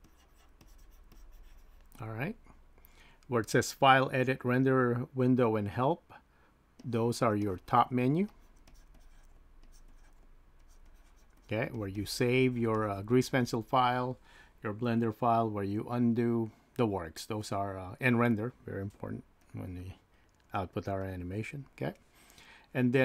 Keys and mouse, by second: 1.1 click, 1.2 typing, 6.8 click, 8.3-12.4 drag, 8.7 typing, 12.7-16.2 drag, 19.5-21.1 drag.